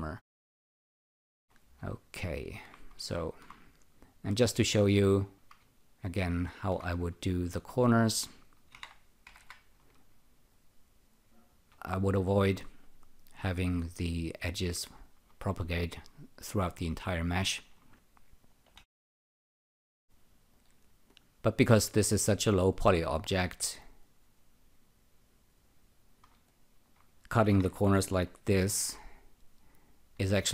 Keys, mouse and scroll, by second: 1.3 click, 2.5 alt+shift+click, 3.2 alt+shift+click, 3.7 click, 4.6 click, 5.3 shift+click, 6.3 alt+shift+click, 7.2 alt+click, 8.7-9.4 typing, 10.5 click, 11.7 <, 13.3 click, 16.0 alt+right click, 17.3 alt+click, 18.8 k, 18.9 k, 20.5 click, 24.0 click, 26.4 alt+click, 27.4 Tab, 27.5 w, 28.7 typing, 29.9 click, 30.3 shift+..